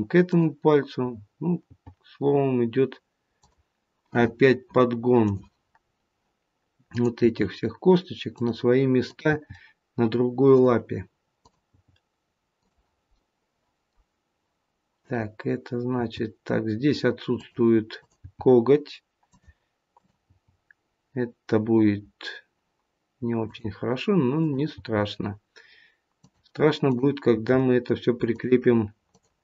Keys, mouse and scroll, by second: 0.8 click, 1.6 g, 5.3 click, 5.8 scroll up 1, 6.8 click, 7.6 g, 9.0 click, 9.5 g, 11.3 click, 11.9 g, 13.1 middle click, 14.9 click, 15.8 g, 17.8 click, 18.9 g, 19.9 click, 20.3 g, 24.3 click, 24.7 g, 26.8 click, 27.3 g, 29.0 click.